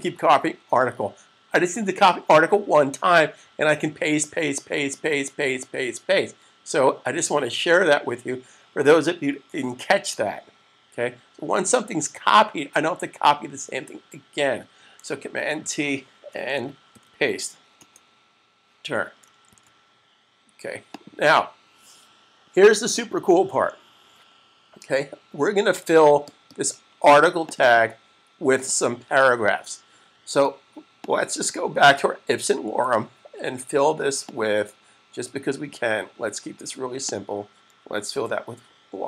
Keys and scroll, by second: 15.6 super+t, 16.8 super+v, 19.6 s, 37.9 1.